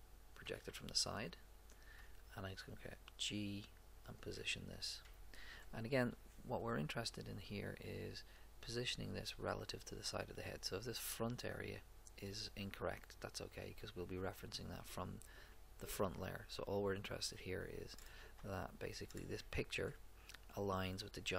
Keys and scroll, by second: 0.4 a, 2.0 g.